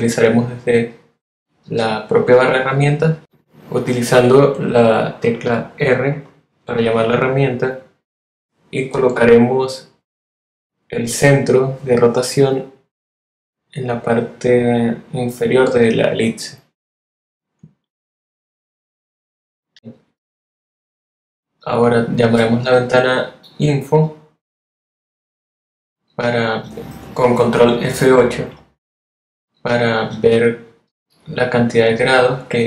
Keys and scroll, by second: 2.3 r, 25.0 super+F8.